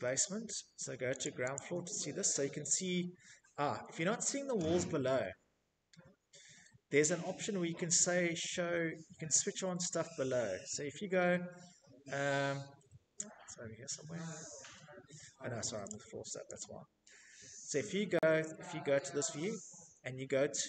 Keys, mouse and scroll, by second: 0.1 click, 2.2 right click, 2.5 click, 2.5 scroll, 5.2 scroll, 5.8-6.7 scroll, 6.7-7.4 scroll, 7.4-7.7 scroll, 9.0 scroll, 9.6-10.4 scroll, 10.4-12.5 scroll, 12.5-13.9 scroll, 14.4 click, 15.2 click, 15.7 Escape, 17.1 Escape, 18.3-20.1 scroll, 20.1 scroll.